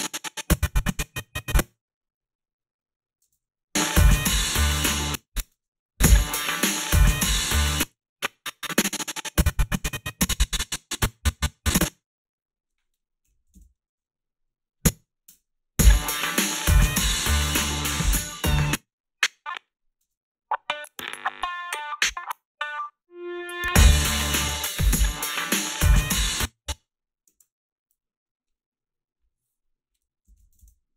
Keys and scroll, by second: 3.3 space, 4.9 space, 5.4 space, 7.6 space, 13.0-13.9 typing, 15.3 space, 18.5 space, 20.0 space, 26.1 space, 27.3 alt+shift+s, 30.0-30.9 typing.